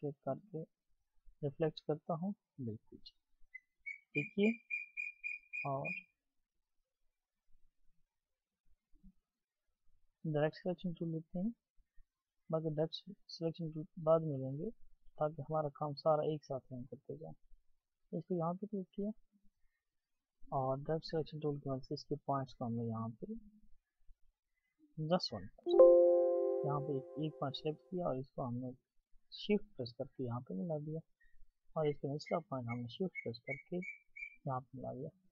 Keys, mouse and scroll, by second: 5.3 Right, 5.5-6.8 alt+scroll up 1, 6.9-8.4 ctrl+scroll down 1, 25.6-27.9 ctrl+scroll, 29.2 Escape.